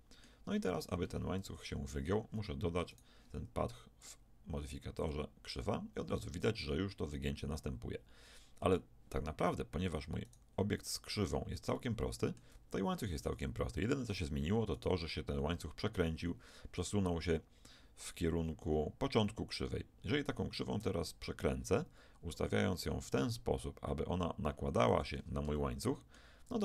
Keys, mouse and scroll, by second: 1.5 KP_1, 2.9-5.6 right drag, 4.0-6.7 drag, 10.3-11.7 right drag, 11.7-14.7 middle drag, 14.7-17.0 drag, 20.8 r, 25.5 click, 26.0-26.6 middle drag.